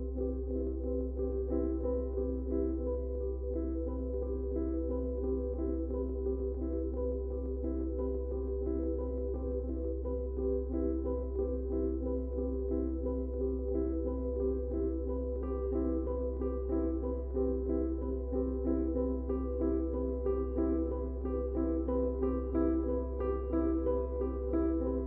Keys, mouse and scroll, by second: 0.0 space, 14.6 ctrl+space, 14.8 ctrl+click, 14.9 ctrl+space, 16.7-23.5 ctrl+drag, 24.1 click, 24.4 space.